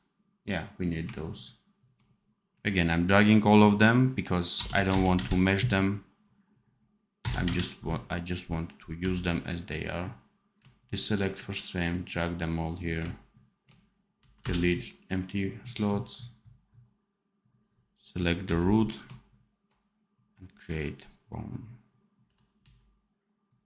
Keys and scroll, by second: 8.9 v, 14.1 Delete, 18.3 n, 22.1 v, 22.5 c.